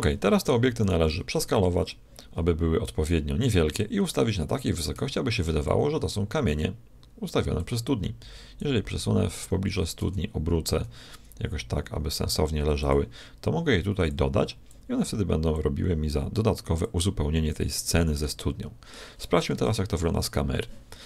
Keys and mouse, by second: 1.4 s, 4.9 z, 5.6-7.4 drag, 8.6-10.5 drag, 9.7 r, 14.1-17.8 drag, 17.8 middle click, 18.4 click, 18.6-20.4 middle drag, 19.5 KP_0.